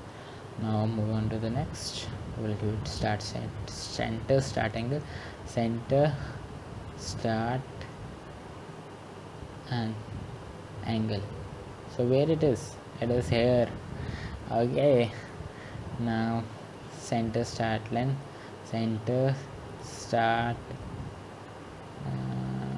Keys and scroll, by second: 15.5 typing.